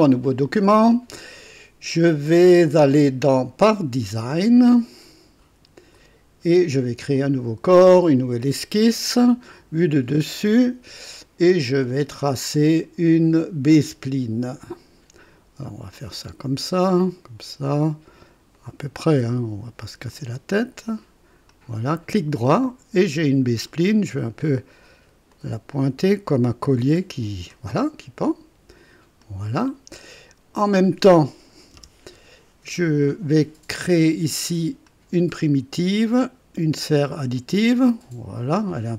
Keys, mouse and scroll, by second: 4.7 click, 6.1 click, 7.1 click, 8.0 click, 9.5 click, 10.4 click, 14.5 click, 15.9 click, 17.1 click, 18.5 click, 20.1 click, 21.5 click, 22.1 right click, 23.7 right click, 25.3-27.7 drag, 29.2 click, 31.7 KP_2, 34.8 click, 37.0 click.